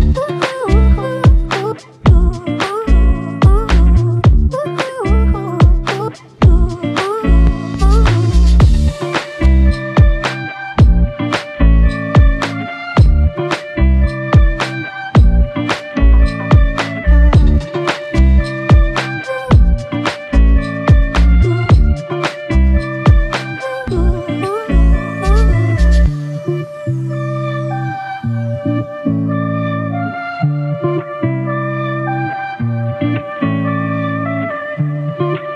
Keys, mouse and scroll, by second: 3.8 alt+click, 5.9 double click, 9.7 alt+click, 12.4 shift+click, 14.0 double click, 15.9 alt+click, 17.0 double click, 18.5 alt+click, 20.7 double click, 24.9 double click, 25.1 shift+click, 26.2 alt+click, 27.6 alt+click, 29.7 alt+click, 32.1 alt+click.